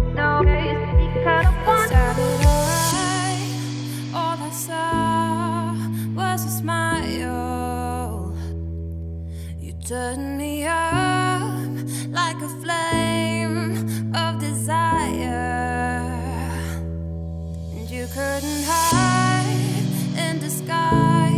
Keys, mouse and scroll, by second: 9.9 click, 10.5 Tab, 11.2 middle click, 11.5 F2, 13.7 a, 14.2 `, 14.6 scroll down 1, 14.7 middle click, 15.1 click, 15.3 4, 15.9 middle click, 16.1 scroll up 2, 18.1-21.3 drag.